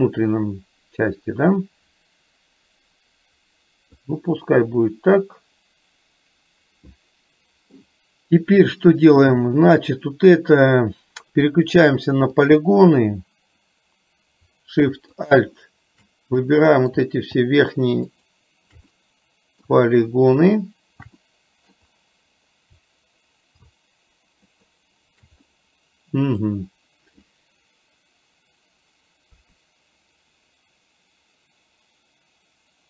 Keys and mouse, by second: 4.5-8.0 middle drag, 9.8 click, 12.6 click, 15.3 click, 16.6 middle click, 18.2 click, 19.0 middle click, 21.2 middle click, 24.6 click, 25.6 middle click, 29.3 KP_3.